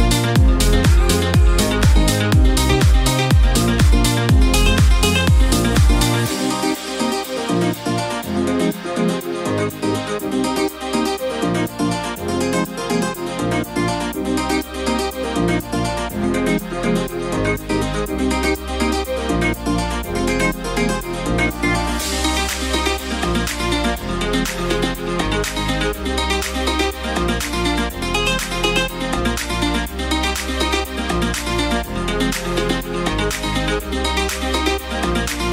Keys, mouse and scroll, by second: 10.2 space, 29.8-31.6 shift+drag.